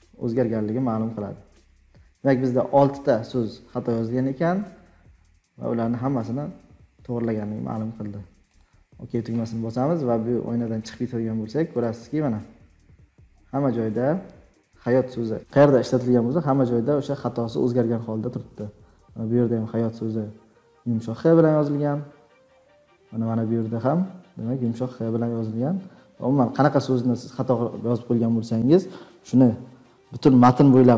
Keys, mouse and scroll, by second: 10.1 click, 10.7 click, 11.1 scroll down 4, 11.8 click, 13.2-13.7 scroll down 7, 15.0 scroll down 3, 16.5 click, 17.1 click, 19.9-20.4 scroll down 3, 22.0-22.6 scroll down 4, 24.6 click, 26.1 scroll down 2, 26.7-27.1 scroll down 4, 30.1-30.9 middle drag, 30.1-30.9 scroll up 13.